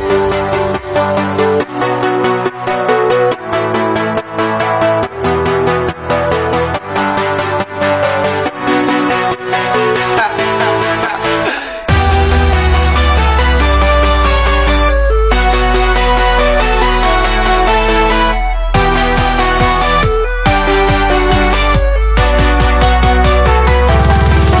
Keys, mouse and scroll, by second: 0.1-0.6 middle drag, 0.6 e, 3.4 x, 5.0 ctrl+z, 5.5-6.2 middle drag, 6.2 click, 6.9 ctrl+z, 7.1 ctrl+z, 7.3-8.5 middle drag, 8.5 i, 10.0 ctrl+r, 12.0 ctrl+b, 13.2 middle click, 13.8 3, 13.9 shift+click, 14.3-16.5 middle drag, 16.5 e, 17.7-18.1 middle drag, 18.1 scroll up 1, 18.3-18.8 shift+middle drag, 18.8 x, 19.5 middle drag, 19.7-20.4 shift+drag, 20.4 x, 20.8-22.2 middle drag, 22.2 click, 22.4-24.5 middle drag, 23.3 scroll up 1, 24.5 scroll up 1.